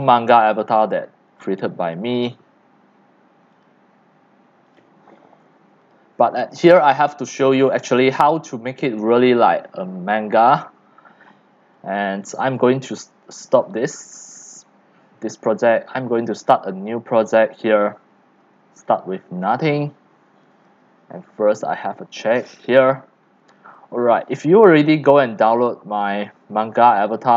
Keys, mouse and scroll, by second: 0.2 click, 0.9 click, 1.3 c, 1.9 c, 1.9 c, 2.0-6.8 drag, 6.8-7.1 scroll, 7.4 click, 7.7 x, 8.0 c, 8.3 click, 9.1 click, 9.4 scroll, 10.4 click, 11.3 scroll down 1, 11.6 x, 12.0 c, 12.5-13.7 drag, 14.5 click, 15.5 drag, 16.4 drag, 20.7 click, 22.3 click, 23.2-23.7 scroll, 23.7 x, 23.9 click, 24.1 c, 25.9 click.